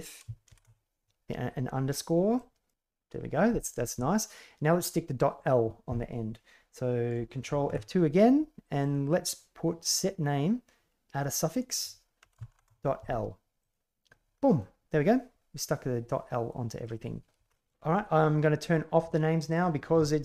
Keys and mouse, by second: 7.6 ctrl+F2, 14.5-15.1 middle drag, 15.1 drag, 15.3-16.8 middle drag, 17.5 shift+middle click, 19.4 click.